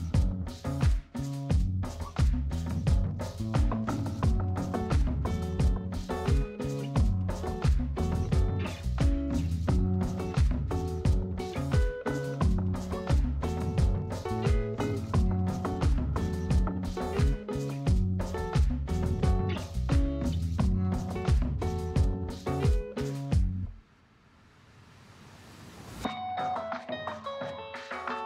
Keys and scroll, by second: 14.0 ctrl+z.